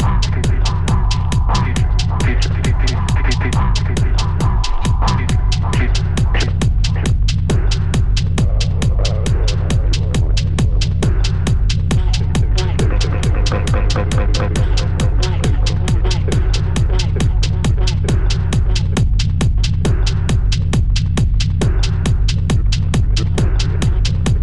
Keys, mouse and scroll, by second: 0.0-0.1 typing, 1.3 g, 1.7 middle click, 1.9 `, 2.9 s, 3.5-4.0 middle drag, 4.0 scroll down 2, 4.1-5.0 middle drag, 5.0 shift+d, 6.6 s, 9.1 s, 10.8 middle click, 11.2 scroll up 1, 11.6 s, 12.7-13.5 middle drag, 13.5 s, 14.8-15.9 middle drag, 15.9 g, 16.9 `, 18.1 `, 20.5 g, 22.1 middle click, 22.5-23.0 scroll up 3, 23.0-23.7 shift+middle drag, 23.7 Tab, 24.0-24.4 scroll up 1.